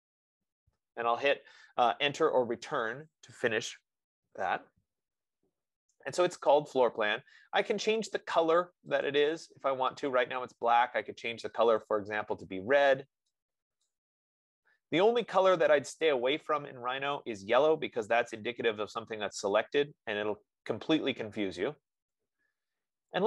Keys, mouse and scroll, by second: 0.0-0.3 typing, 0.8 Return, 9.4-13.6 drag.